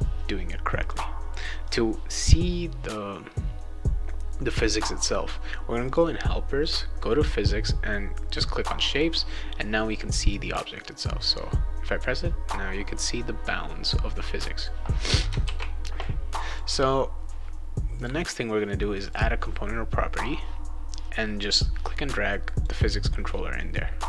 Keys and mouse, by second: 0.8 click, 1.6 click, 5.8 click, 8.3 click, 8.9 click, 10.4 click, 11.2 click, 14.6 click, 15.4 ctrl+s, 16.5 click, 17.9 click, 19.0 click, 21.5-22.6 drag.